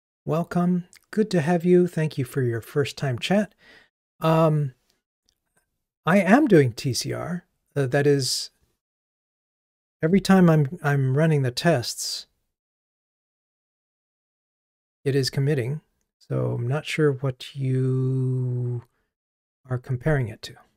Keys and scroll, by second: 15.1 super+9.